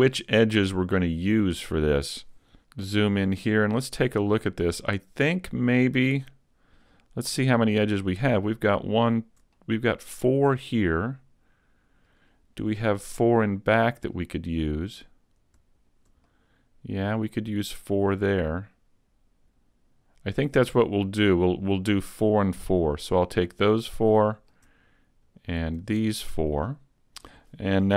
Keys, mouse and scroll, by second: 0.8 click, 2.2 scroll down 5, 8.3 right click, 9.1 shift+right click, 9.6 middle click, 12.4 scroll down 2, 12.8 middle click, 14.9 right click, 15.8 shift+right click, 16.3 middle click, 23.3-24.2 scroll up 2, 24.2 middle click, 25.2 shift+right click, 25.8 shift+right click, 26.2 middle click.